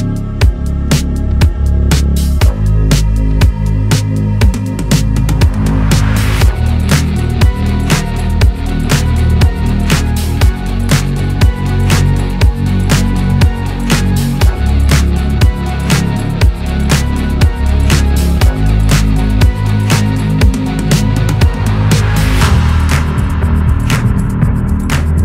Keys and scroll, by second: 4.0 ctrl+c, 5.3 ctrl+v, 6.0 ctrl+z, 10.5-11.6 Left, 12.3 ctrl+g, 17.0-17.3 Left, 17.3 Right, 17.4 Right, 22.5-22.9 typing, 23.2 Return.